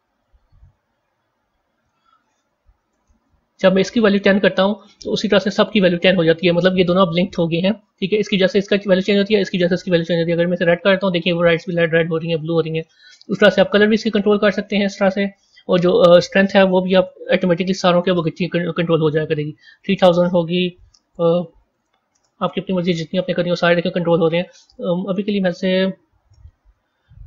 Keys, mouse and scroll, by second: 5.3 KP_0, 8.4 click, 9.7 click, 16.0-17.2 drag, 17.2 KP_0, 17.3 KP_0, 19.7-21.1 drag, 21.1 KP_0, 21.3 KP_0, 21.5 KP_0, 23.5-24.5 drag, 24.5 KP_0, 24.6 KP_0, 26.4-27.2 typing.